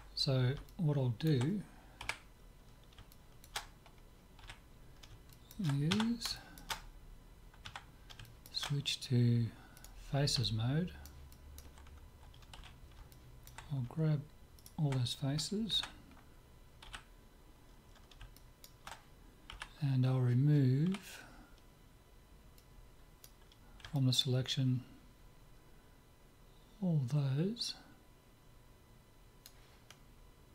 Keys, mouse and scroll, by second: 0.7-2.6 middle drag, 2.0 KP_7, 3.1-8.1 middle drag, 4.4 z, 5.9 Tab, 7.7 Tab, 9.8 middle click, 9.9 click, 10.4-14.6 middle drag, 11.2 click, 12.6 z, 14.6 click, 14.6-16.4 right drag, 15.7 KP_7, 17.0 z, 17.4-20.5 middle drag, 19.5 c.